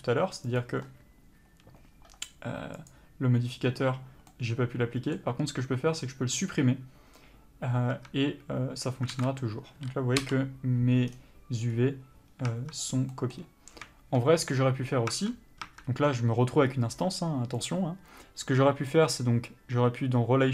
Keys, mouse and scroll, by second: 4.6 middle click, 8.2 Tab, 9.4 alt+a, 10.5 l, 12.8 Tab, 13.4 middle click, 15.4 Tab.